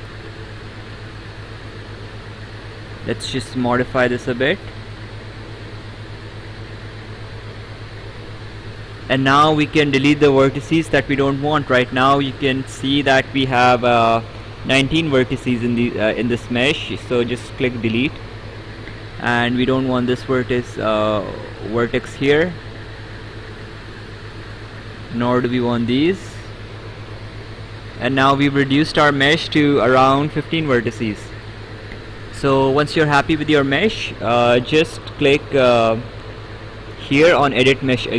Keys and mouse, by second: 1.7 click, 4.0 click, 9.5 right click, 17.9 click, 18.7 right click, 21.3 click, 22.9 click, 24.4 click, 27.6 click.